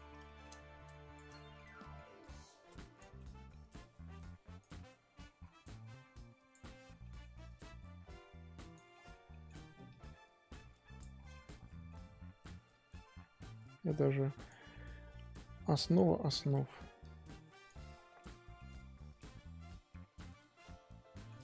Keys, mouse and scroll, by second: 0.9 click, 1.3 shift+middle click, 2.2 click, 3.1 middle click, 3.8 click, 4.7 middle click, 5.6-6.7 drag, 6.7 shift+middle click, 7.6-8.9 drag, 8.9 middle click, 9.8-11.1 drag, 11.1 scroll down 1, 11.3-12.7 middle drag, 12.7-14.7 drag, 14.7-16.4 middle drag, 16.4-17.9 drag, 17.9 scroll down 2, 18.1 middle click, 18.8-19.2 scroll down 1, 19.2 middle click, 20.0-20.5 scroll up 6, 20.5 middle click, 21.3-21.4 scroll down 1.